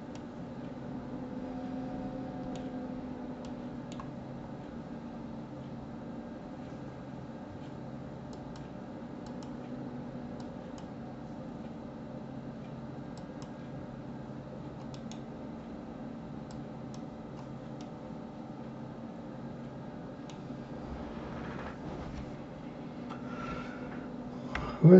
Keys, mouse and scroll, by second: 0.1-3.1 middle drag, 3.5 middle click, 4.2-4.6 scroll up 2, 4.9-5.8 scroll up 4, 5.8-6.6 scroll down 1, 8.3 click, 9.2 click, 10.4 click, 13.2 click, 14.9-17.8 right drag, 17.8-20.3 middle drag, 20.3-21.0 scroll down 2, 21.0-21.7 scroll up 2.